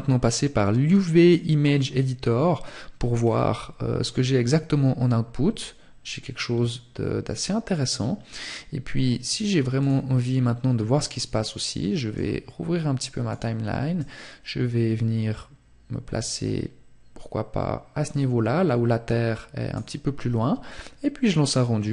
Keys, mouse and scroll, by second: 8.4 click, 10.7 click.